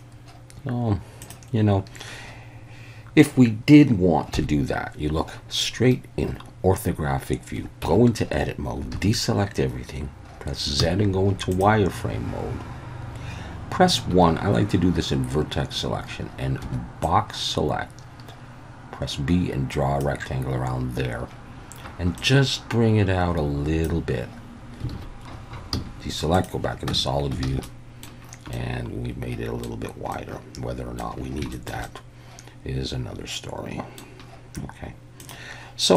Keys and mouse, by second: 1.3-4.3 drag, 4.3 KP_1, 7.9 Tab, 8.9 alt+a, 10.8 z, 14.1 1, 16.6 b, 22.3-23.8 drag, 24.9 alt+a, 25.7 z, 26.9 Tab, 27.4 alt+a, 27.6-28.0 middle drag, 28.5-29.6 middle drag, 30.1-31.0 middle drag, 31.5 shift+middle click, 31.9-34.0 middle drag.